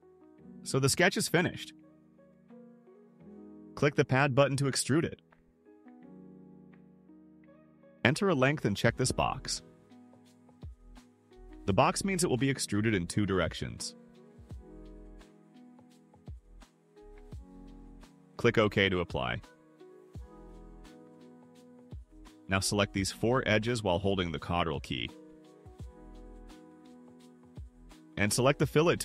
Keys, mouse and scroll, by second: 0.5 middle click, 0.5-1.1 scroll down 3, 0.7 middle click, 0.9 middle click, 1.7 scroll up 2, 2.0 right click, 5.5 click, 7.2 0, 7.4 0, 9.1 click, 12.7 click, 12.9 click, 13.1 click, 13.3 click, 13.5 click, 13.7 click, 13.8 click, 14.5 click, 14.8 click, 14.9 click, 15.1 click, 15.3 click, 15.5 click, 15.7 click, 18.9 click, 21.4 click, 23.1 ctrl+click, 23.8 ctrl+click, 25.3 ctrl+click, 26.8 ctrl+click.